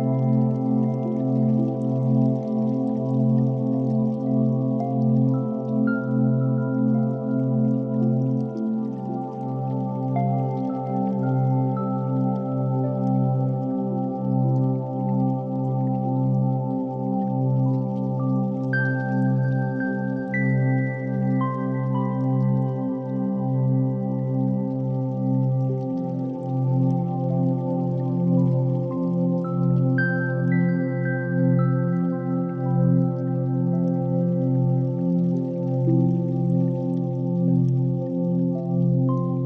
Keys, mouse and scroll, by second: 0.0-0.4 shift+middle drag, 0.9 shift+d, 0.9 z, 2.8 click, 3.3 shift+r, 4.6 shift+r, 7.5 shift+click, 7.9 shift+drag, 8.6 shift+click, 8.8 shift+click, 10.0 shift+drag, 11.3 shift+click, 12.9 ctrl+j, 13.8 g, 14.0 z, 15.2 shift+click, 15.7 s, 16.8 click, 16.9 g, 17.1 z, 20.1 shift+click, 20.9 KP_7, 21.8 g, 22.1 y, 22.8 shift+click, 23.5 KP_1, 24.3 click, 25.5 shift+a, 29.8 click, 30.5-31.4 drag, 31.9-32.9 drag, 33.7-35.8 drag, 36.2 click, 36.9-39.4 drag.